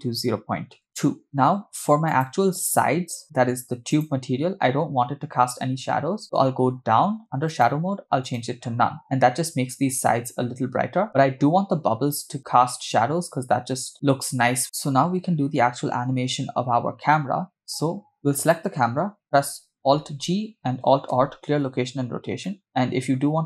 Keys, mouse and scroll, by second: 2.1 click, 3.9 click, 6.3-7.5 scroll down 9, 7.5-8.5 drag, 14.6 scroll up 1, 16.0 scroll down 1, 16.3 scroll up 1, 17.3 scroll down 2, 17.6-17.9 scroll up 3, 18.4-18.8 drag, 20.2 alt+g, 21.2 alt+r, 22.0 scroll down 2, 22.5 middle click.